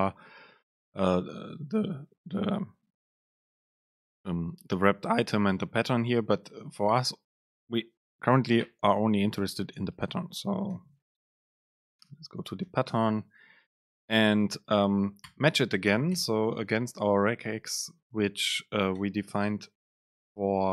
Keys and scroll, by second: 12.0 super+space.